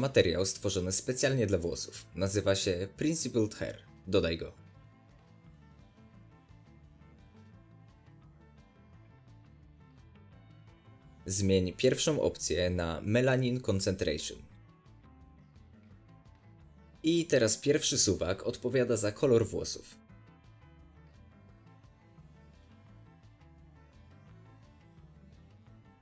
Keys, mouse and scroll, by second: 0.2 click, 1.3-6.9 drag, 6.9 middle click, 6.9 shift+a, 7.7 click, 8.5-9.6 drag, 11.2-11.5 scroll up 1, 11.7-14.4 middle drag, 14.4-24.1 drag, 24.0 scroll down 2, 24.1-26.0 middle drag.